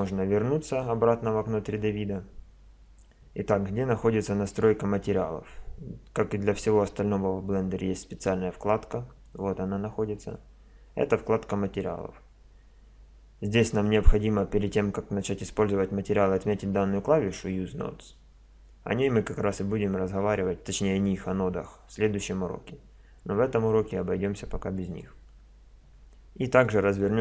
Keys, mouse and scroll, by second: 0.0 Escape, 9.2 click, 24.8-27.2 drag.